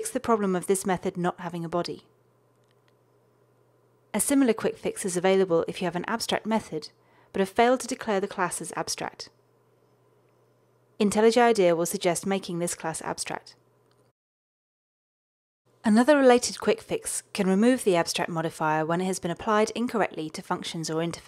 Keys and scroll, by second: 4.1 ctrl+alt+shift+Right, 10.0 alt+Return, 19.4 alt+Return.